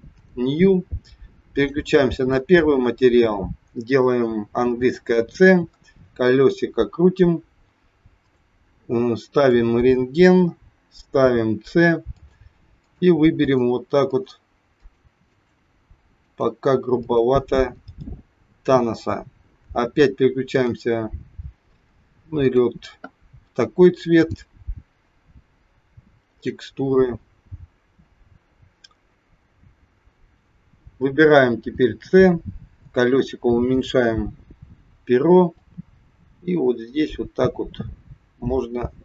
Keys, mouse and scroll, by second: 0.0 click, 1.5 click, 4.6 c, 9.4 click, 11.1 c, 20.7 click, 22.4 click, 24.1 click, 29.0-29.3 scroll up 2, 30.1 scroll down 2, 31.6 c.